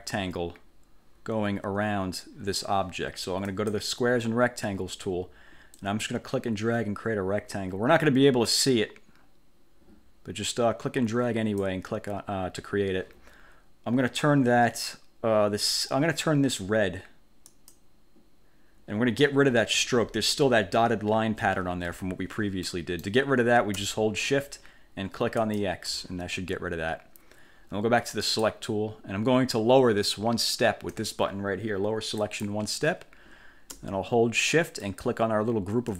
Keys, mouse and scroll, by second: 3.6 click, 5.8-12.0 drag, 17.6 click, 20.1-20.5 ctrl+scroll up 2, 22.0 1, 22.8 click, 25.6 shift+click, 28.4 click, 32.3 click, 35.0 shift+click.